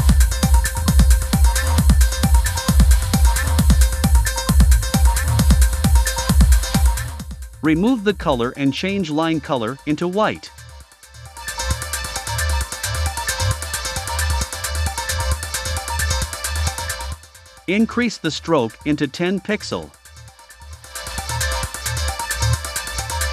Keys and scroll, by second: 0.0 BackSpace, 0.3 7, 2.7 BackSpace, 3.1 8.